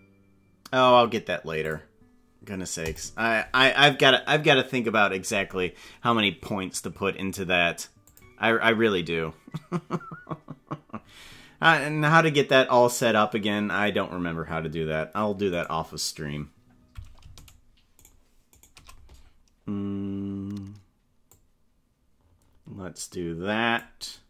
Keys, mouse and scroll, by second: 15.9 right click, 17.7 shift+right click, 18.3 right click, 18.9 right click, 21.4-23.8 drag.